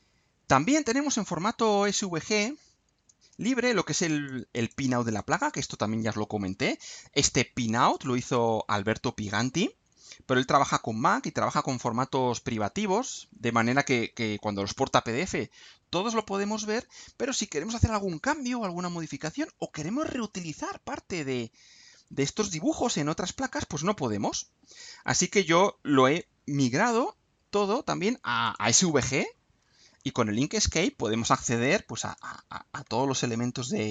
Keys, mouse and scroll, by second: 0.7 click, 4.1 click, 4.6 click, 5.1 click, 7.9 click, 8.2 right click, 16.1 click, 20.6-21.3 scroll down 4, 21.7-25.3 scroll up 2, 25.3-26.3 drag, 26.6-26.9 scroll up 2, 27.1 scroll down 2, 28.4 click, 29.7-30.1 ctrl+scroll up 2, 31.5 click, 32.1 click, 33.0 ctrl+scroll down 2.